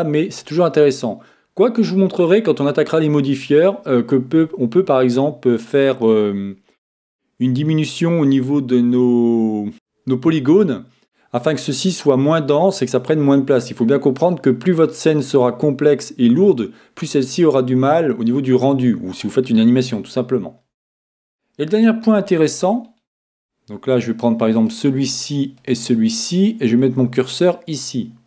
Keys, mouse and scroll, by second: 22.7-24.6 middle drag, 24.5-27.2 right drag, 27.2-28.2 drag, 27.3 right click.